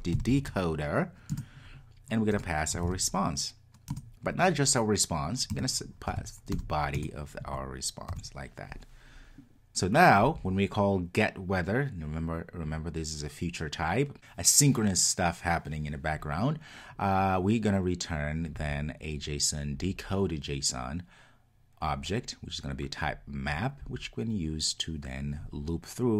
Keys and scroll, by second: 1.3 Return.